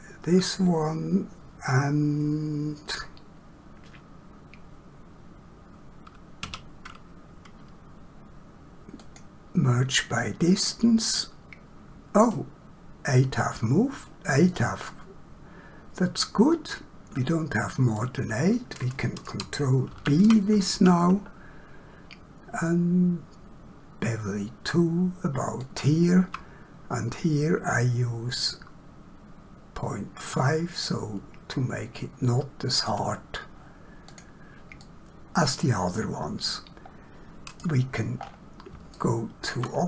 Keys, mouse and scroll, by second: 6.4 q, 9.0 click, 14.5 middle click, 19.9 ctrl+b, 28.3 click, 34.0 click, 34.8 middle click, 38.2 scroll down 1, 38.9 shift+middle click.